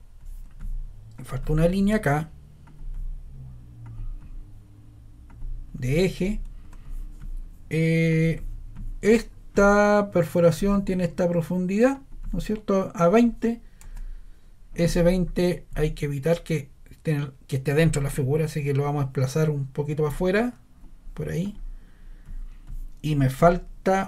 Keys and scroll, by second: 6.6 scroll.